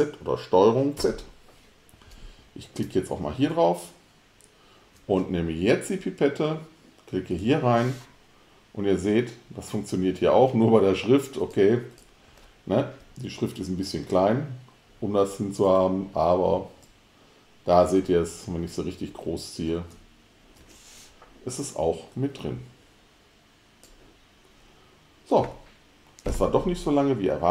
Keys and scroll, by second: 1.1 super+z.